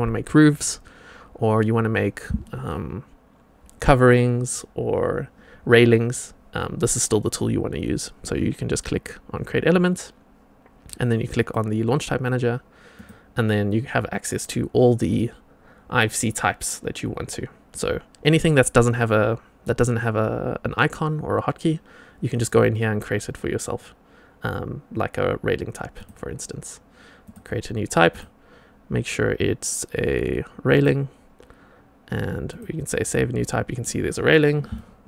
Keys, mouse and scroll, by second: 11.3-33.9 drag, 34.7-35.0 shift+right drag.